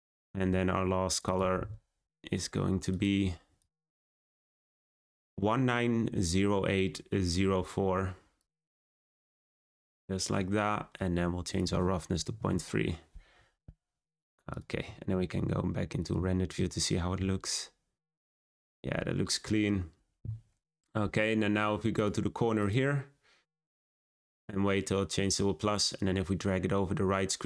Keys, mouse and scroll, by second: 3.0-7.4 drag, 9.0-14.1 drag, 14.1-14.6 scroll down 1, 17.2 z, 18.0-20.1 scroll up 1, 22.7 click, 26.3-27.4 drag.